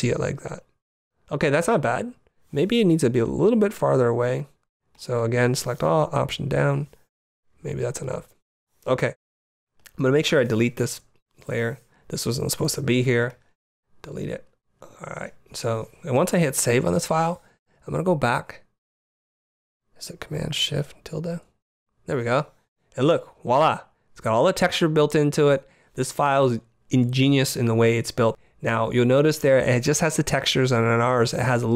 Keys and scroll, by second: 4.0 t, 5.3 super+a, 5.8 alt+super+a, 6.1 alt+super+Down.